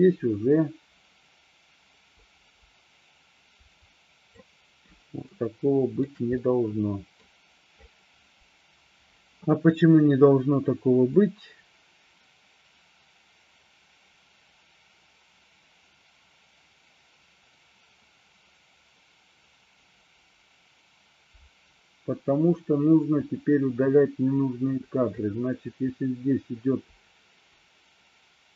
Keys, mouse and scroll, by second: 5.5-6.0 shift+middle drag, 6.5-7.3 middle drag, 11.3-28.5 drag.